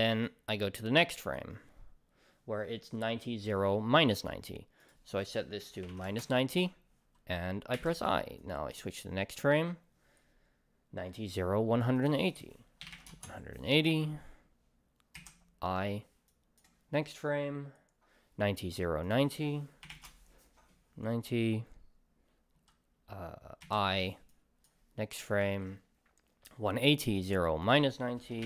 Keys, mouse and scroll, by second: 0.2-6.1 right drag, 6.1-8.4 drag, 6.2 Return, 8.4-13.1 right drag, 13.1-16.3 drag, 13.2 Return, 16.3-19.9 right drag, 19.9-24.3 drag, 20.1 Return, 24.3-28.4 right drag, 25.4 ctrl+s.